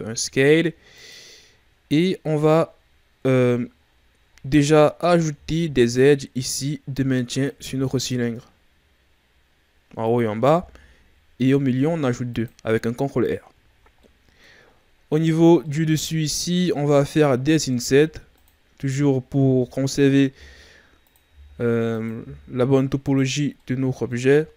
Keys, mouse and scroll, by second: 1.5-1.9 scroll down 2, 1.9-2.6 scroll up 5, 2.6-3.8 scroll down 3, 3.8-5.3 scroll up 13, 5.3 ctrl+r, 7.6 ctrl+r, 13.6-13.9 scroll up 3, 13.9 middle click, 14.6-15.6 scroll down 11, 15.6 middle click, 16.0-16.3 scroll up 3, 16.3-16.7 scroll down 1, 16.7 middle click, 17.0-17.7 scroll up 1, 17.7 ctrl+Tab, 18.7 right click, 20.2 i, 21.2 i, 22.1 i, 23.5 middle click, 24.3-24.5 shift+scroll up 5.